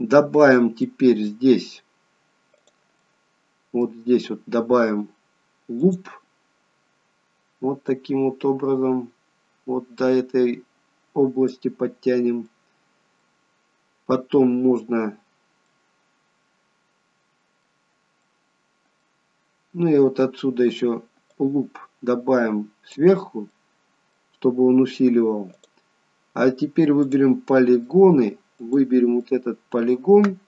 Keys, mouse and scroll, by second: 0.9 middle click, 2.6 click, 3.0 middle click, 5.9 click, 7.9 click, 12.5 middle click, 15.8 middle click, 18.3 middle click, 23.6 middle click, 25.6 click, 27.1 click, 27.6 middle click, 28.6 click, 29.3 middle click.